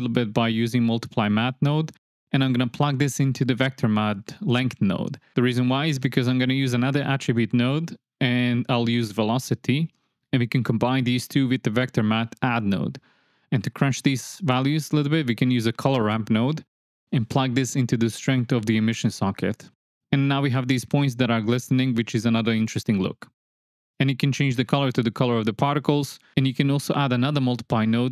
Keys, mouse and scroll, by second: 0.2-0.6 middle drag, 0.6 click, 1.1 space, 1.3 space, 1.4 click, 2.8 click, 3.5 shift+click, 4.0 shift+click, 5.0 click, 5.6 click, 6.4 ctrl+shift+click, 7.0 click, 7.2 shift+a, 8.0 click, 8.4-9.4 drag, 9.8-10.2 drag, 11.0 shift+d, 11.3 click, 11.9 click, 12.4-12.7 drag, 12.9 click, 13.7 ctrl+shift+click, 14.5 shift+a, 15.3 click, 15.8-16.1 drag, 16.2 click, 16.9-17.4 drag, 17.7 click, 17.9 click, 18.1-18.5 drag, 19.0 click, 19.2 space, 20.6 space, 21.1 click, 21.3 click, 21.7 click, 22.0 click, 22.8 click, 23.5 space, 25.0 space, 25.4 space, 26.3 space, 26.9 click.